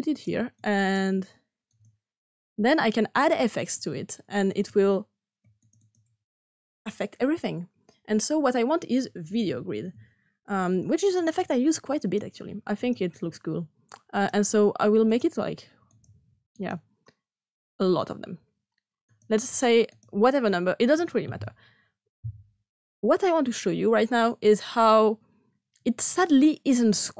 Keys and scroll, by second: 8.9-10.3 typing.